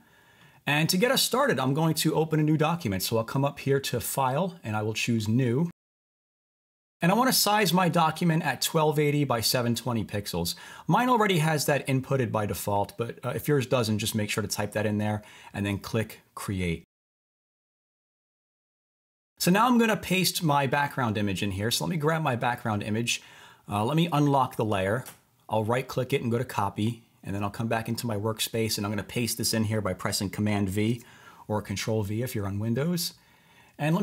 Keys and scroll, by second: 30.9 super+v.